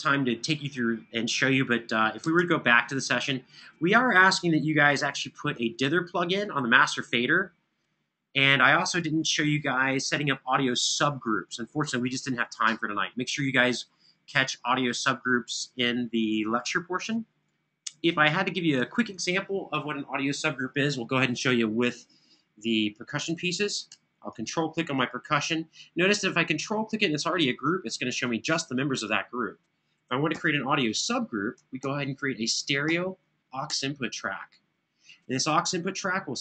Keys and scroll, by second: 2.1 super+Tab, 5.2 super+=, 30.0 shift+super+n, 31.6 super+Right, 32.7 super+Down, 33.5 Return.